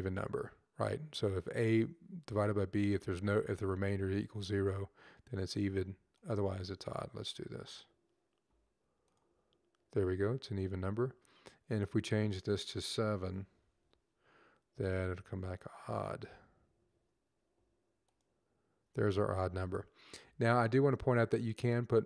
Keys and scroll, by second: 13.2 typing.